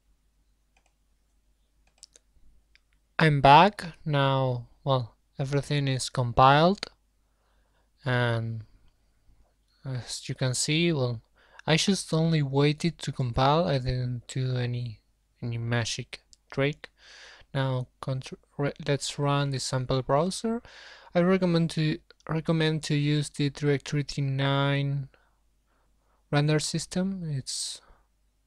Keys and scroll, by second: 2.6 alt+2, 12.4 ctrl+F5.